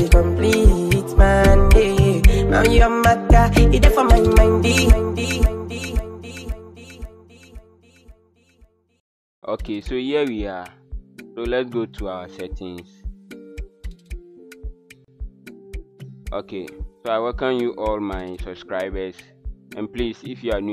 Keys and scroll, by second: 4.3 h.